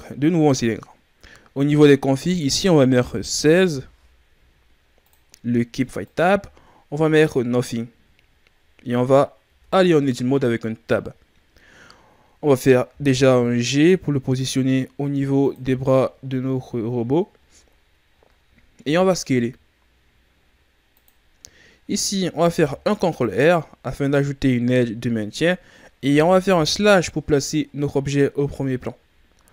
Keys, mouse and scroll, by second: 2.1 click, 6.0 click, 9.4 Tab, 10.2-11.1 scroll up 3, 11.1-12.8 scroll up 1, 12.8 g, 15.7-16.2 scroll up 3, 16.2-16.5 scroll down 4, 16.5-17.3 scroll up 6, 17.3-18.1 scroll up 4, 18.1-18.6 scroll down 5, 18.7 s, 21.2-22.4 ctrl+scroll down 4, 22.4 ctrl+r, 26.5 KP_Divide, 28.0-28.7 scroll down 1, 28.7-29.3 scroll down 1, 29.3-29.5 ctrl+scroll down 1.